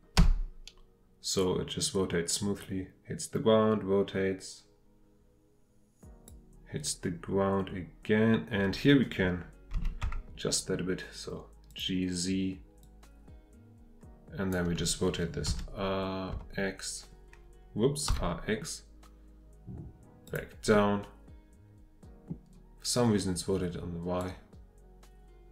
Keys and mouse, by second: 5.1-18.1 drag, 18.1 x, 20.9-25.5 middle drag.